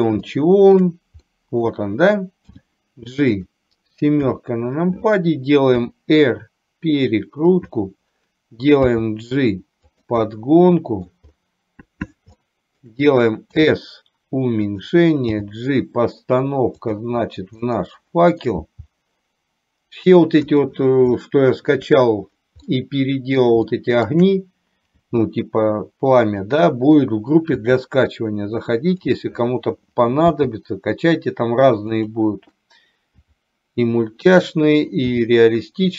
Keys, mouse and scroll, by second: 0.4 shift+middle click, 1.4 middle click, 2.6 g, 4.4 KP_7, 5.9 r, 9.0 g, 10.4 middle click, 12.5 shift+middle click, 13.7 s, 15.5 g, 17.9 middle click, 18.6 g, 21.4 shift+middle click, 22.7 middle click, 23.7 shift+middle click, 25.1 g, 27.7 s, 30.4 g, 33.4 s, 35.2 g.